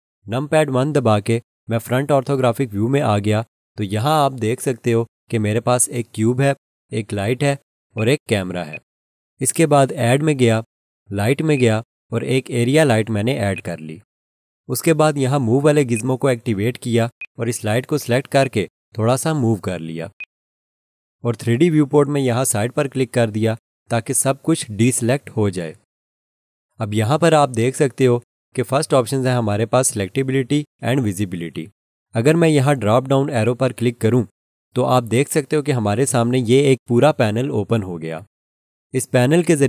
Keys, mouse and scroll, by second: 2.1 1, 8.0 click, 24.8 click, 33.4 click.